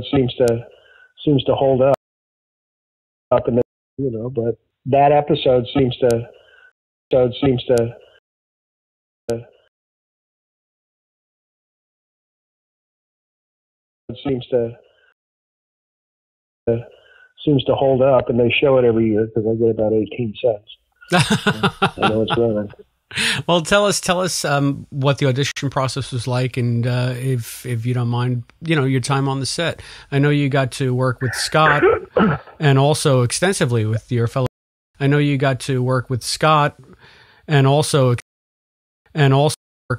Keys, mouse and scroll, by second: 0.5 click, 1.1 click, 1.9 space, 2.6 click, 3.2 space, 3.5 space, 3.8 click, 3.9 space, 6.6 space, 7.0 click, 7.0 space, 8.1 space, 8.4 click, 8.6 click, 9.2 space, 9.6 space, 10.0 click, 12.2-13.2 shift+drag, 13.9 click, 14.0 space, 15.0 space, 15.5 click, 15.7 click, 16.6 space, 18.2 click, 19.0 click, 20.1 click, 20.9-22.6 drag, 23.0 click, 23.9-25.1 drag, 25.4 Delete, 26.8 click, 27.7 click, 28.3-30.4 drag, 30.7 click, 32.1 click, 33.2-34.3 drag, 34.3 space, 34.8 click, 34.8 space, 37.0-38.1 drag, 38.1 space, 38.8 ctrl+shift+Delete, 39.0 space, 39.4 space, 39.7 click, 39.8 space.